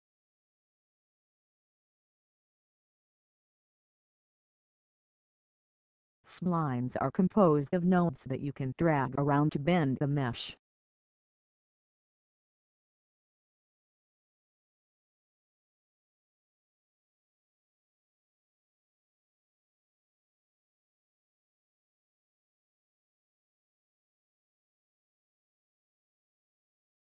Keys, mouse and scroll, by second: 4.0 click, 6.7 scroll down 1, 11.4 click, 15.3-17.3 scroll up 1, 19.4 click, 21.8-22.6 scroll down 1, 23.7 click, 25.2 scroll down 1, 26.3 scroll down 1.